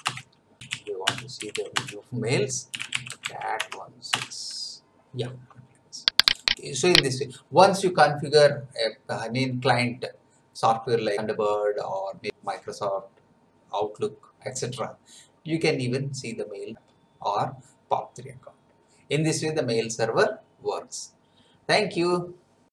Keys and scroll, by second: 0.0-1.3 typing, 0.0 Return, 1.7 Return, 2.4-3.7 typing, 4.1 Return.